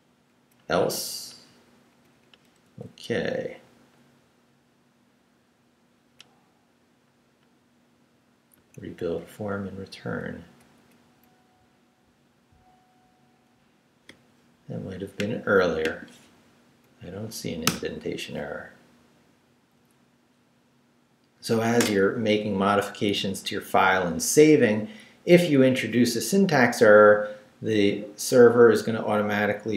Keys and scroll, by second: 0.3 Up, 1.9 Up, 2.6 Left, 3.5 Down, 4.7 Down, 5.9 Down, 8.6 Right, 9.4 Up, 12.8 Down, 16.6 Up, 17.6 Return.